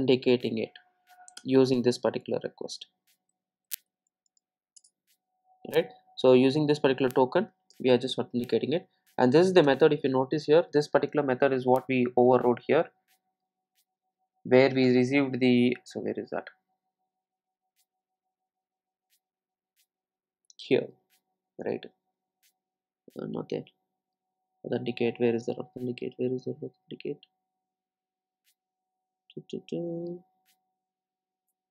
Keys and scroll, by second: 1.4 Return, 7.7 Return.